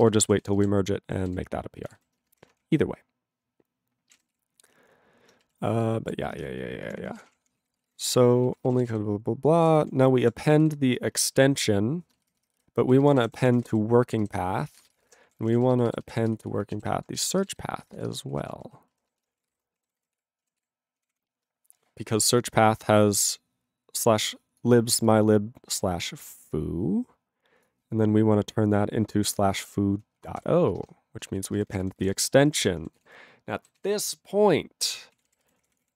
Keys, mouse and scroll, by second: 0.0 ctrl+g, 0.4 ctrl+s, 0.6 scroll down 1, 0.6 ctrl+n, 1.2 ctrl+n, 1.2 ctrl+n, 1.3 ctrl+n, 1.9 scroll down 1, 2.0 ctrl+n, 2.4 alt+>, 2.8-4.1 ctrl+p, 4.3 ctrl+s, 6.4 ctrl+-, 6.9 ctrl+p, 7.0 ctrl+p, 7.1 ctrl+e, 7.2 ctrl+p, 7.3 ctrl+e, 7.3 ctrl+p, 7.5 ctrl+p, 7.6 ctrl+a, 7.8 ctrl+space, 7.8 ctrl+e, 7.9 ctrl+n, 8.0 ctrl+g, 8.1 ctrl+e, 8.5 ctrl+a, 8.5 ctrl+p, 8.6 ctrl+space, 8.7 ctrl+e, 8.7 ctrl+n, 8.8 ctrl+n, 8.8 ctrl+e, 8.9 ctrl+g, 9.6 ctrl+o, 9.7 ctrl+n, 9.8 ctrl+a, 10.2 Tab, 10.7 ctrl+s, 11.5 ctrl+p, 13.0 alt+d, 13.1-14.2 typing, 14.3 ctrl+g, 14.7 ctrl+a, 14.8 ctrl+space, 14.9 ctrl+n, 15.3 alt+w, 15.4 ctrl+p, 15.4 ctrl+y, 15.5 ctrl+p, 15.6 ctrl+e, 15.9 alt+b, 15.9 alt+b, 16.0 alt+b, 16.3 alt+f, 16.4 alt+f, 16.6 alt+f, 16.7 alt+b, 17.4 ctrl+b, 17.4 ctrl+e, 18.0 ctrl+w, 18.2-20.0 typing, 20.1 ctrl+e, 20.2 ctrl+e, 20.7 ctrl+s, 21.0 ctrl+p, 21.1 ctrl+p, 22.2 click, 22.3 click, 22.3 click, 22.4 click, 22.9 click, 24.0 click, 24.3 click, 24.6 click, 25.1 click, 26.1 click, 26.4 click, 27.7 click, 29.6 click, 29.6 click, 30.1-31.0 typing, 31.5 ctrl+n, 31.6 ctrl+n, 31.7 ctrl+n, 31.8 ctrl+n, 31.9 ctrl+space, 32.0 ctrl+n, 32.0 ctrl+e, 32.2 ctrl+n, 32.5 ctrl+p, 32.6 ctrl+g, 33.1 ctrl+s, 33.1 ctrl+n, 33.8 ctrl+s, 34.3 ctrl+s, 35.2 ctrl+a, 35.3 ctrl+k, 35.5 ctrl+n, 35.6 ctrl+o, 35.7 ctrl+o, 35.8 Tab.